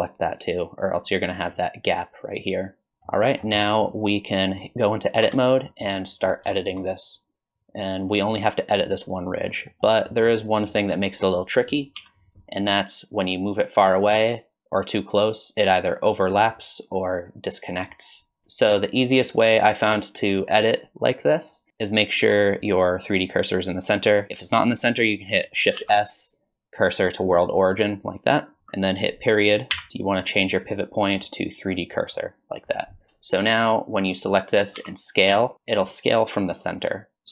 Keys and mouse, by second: 1.4-2.9 right drag, 2.9 middle click, 3.7 middle click, 5.2 Tab, 5.7 middle click, 6.5 shift+middle click, 7.9 click, 9.7 middle click, 10.2 middle click, 10.8 middle click, 12.0 2, 12.4 click, 13.4-23.7 drag, 25.8 shift+s, 34.8 s.